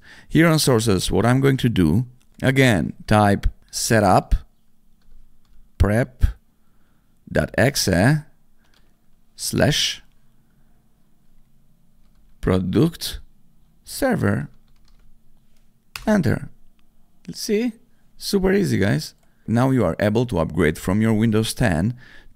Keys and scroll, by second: 3.4-8.6 typing, 11.6-15.3 typing, 15.9 Return.